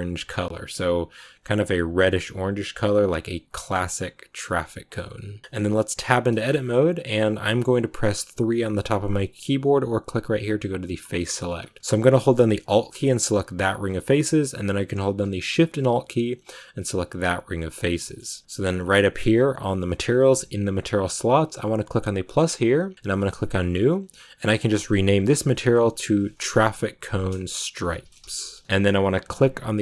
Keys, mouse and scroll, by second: 5.4 middle click, 5.9 Tab, 6.2 shift+middle click, 6.5-8.5 scroll up 1, 8.5 3, 10.9 click, 11.3-12.5 scroll up 2, 12.5 alt+right click, 13.9-16.8 shift+middle drag, 16.8 alt+shift+right click, 17.9-22.2 shift+middle drag, 22.2-24.2 drag, 24.9 click, 27.0-28.6 drag, 28.6 shift+middle click, 29.3 click.